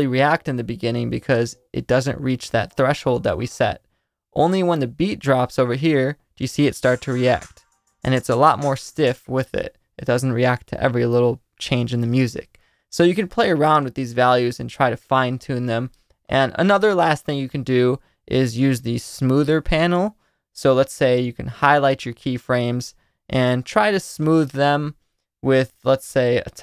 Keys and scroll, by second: 6.6 space, 9.0 space.